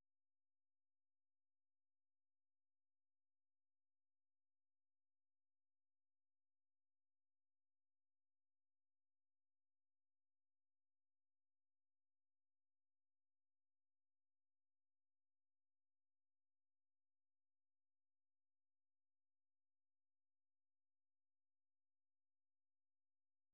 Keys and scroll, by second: 0.9 ctrl+v, 1.5 Return, 13.4-15.7 typing, 16.9-18.0 typing.